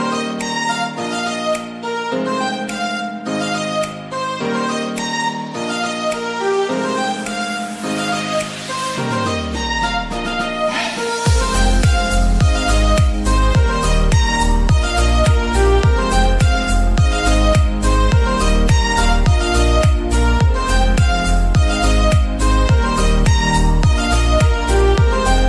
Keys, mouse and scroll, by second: 0.9 click, 1.6 click, 2.0 shift+click, 2.8 s, 4.5 shift+middle click, 5.2 click, 5.6 shift+click, 6.0 middle click, 6.5 s, 8.6 middle click, 9.1 click, 9.4 shift+click, 10.0 s, 11.8 shift+middle click, 12.5 click, 13.0 shift+click, 13.6 s, 15.0 middle click, 15.8 KP_1, 16.5 KP_3, 17.6-18.9 middle drag, 18.9 click, 19.5 click, 19.9 middle click, 20.6-21.0 scroll up 2, 21.0 middle click, 21.9 e, 22.7 s, 25.2 middle click.